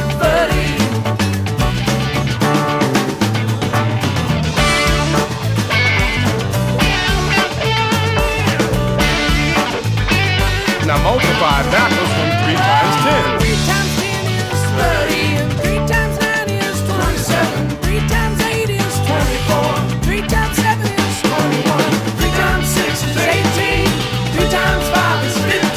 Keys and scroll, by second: 1.3 shift+super+j, 6.4 shift+super+o, 6.9 shift+super+t, 15.3 shift+space, 24.6 shift+super+t.